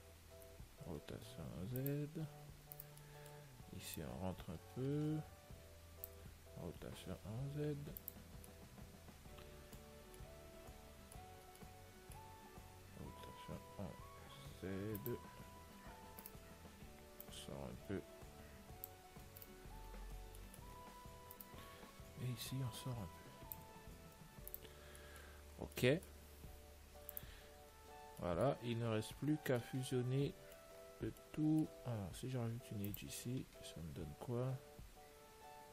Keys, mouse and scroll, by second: 1.1 r, 3.0-4.8 right drag, 3.3-5.3 middle drag, 4.2 click, 6.8 r, 8.7-16.5 middle drag, 13.3 r, 16.5-18.3 right drag, 17.5 click, 19.7-23.5 right drag, 20.7-22.7 middle drag, 22.7 click, 24.1-25.3 middle drag, 24.7 ctrl+s, 25.6 Tab, 27.3 ctrl+s, 28.2 middle click, 29.0 middle click, 29.2 Tab, 31.1-33.5 middle drag, 32.9 ctrl+r.